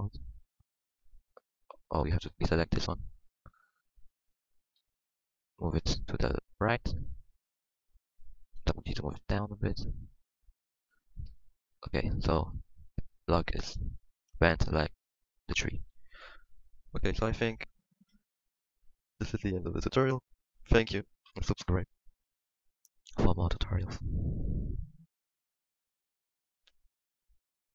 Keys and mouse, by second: 0.8 z, 2.1 c, 3.5 Tab, 3.9 Tab, 4.5 z, 6.2 z, 8.5 g, 9.7-10.9 drag, 10.9 Tab, 12.3 ctrl+s, 16.1 ctrl+s, 18.3 middle click.